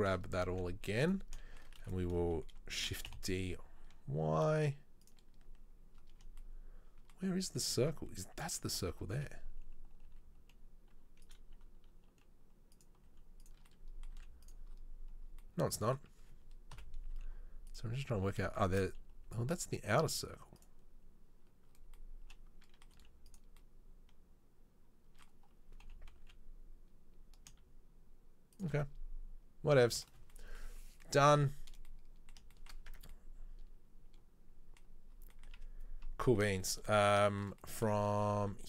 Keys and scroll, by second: 0.2 KP_7, 0.7 z, 2.9 shift+d, 8.8 a, 10.2 g, 11.8 r, 13.1 g, 14.3 z, 17.0 KP_7, 17.2 z, 19.4 g, 23.0 z, 26.1 g, 33.0 Tab.